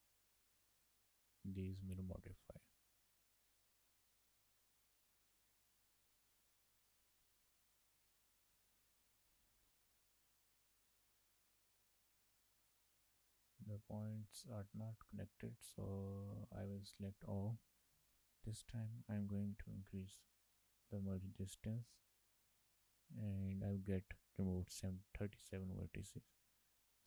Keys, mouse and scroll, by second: 0.2 click, 1.4 click, 4.5 click, 6.6 click, 7.3 Tab, 8.1-8.6 scroll up 4, 8.6 shift+middle click, 9.1-10.5 scroll up 6, 11.7 click, 12.4 click, 14.3 ctrl+z, 14.7-15.2 scroll down 5, 15.5 shift+middle click, 15.8 scroll down 1, 16.1 shift+middle click, 16.6 a, 18.5 m, 21.4 click, 22.7 shift+middle click, 25.9 scroll up 3, 26.7 scroll up 4.